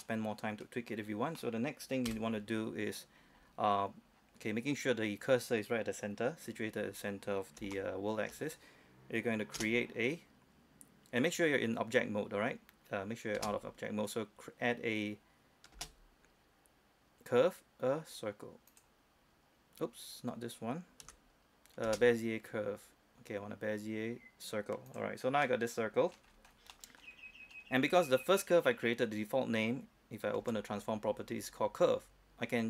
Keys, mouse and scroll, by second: 0.1 scroll up 1, 0.3-1.6 middle drag, 1.6-2.3 scroll down 1, 2.3 KP_7, 3.1-3.4 scroll up 1, 3.9-4.3 scroll down 1, 6.7-7.0 scroll up 1, 7.0-7.8 scroll down 1, 7.9 shift+middle click, 8.5-9.7 scroll up 1, 9.7 space, 10.4 space, 13.6 space, 15.1 space, 15.9 space, 18.9 click, 21.2 Escape, 22.0 space, 25.1 click, 25.6 middle click, 26.5-26.9 scroll down 1, 26.9 middle click, 27.2-27.6 scroll up 1, 27.6 scroll down 1, 27.8-28.2 scroll up 1, 28.2 right click, 30.6 n.